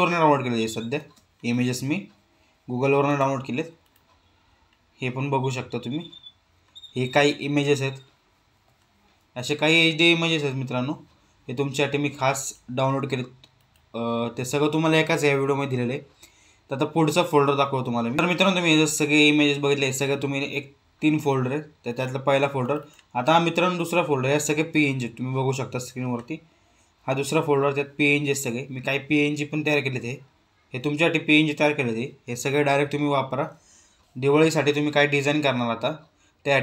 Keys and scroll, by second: 1.0 space.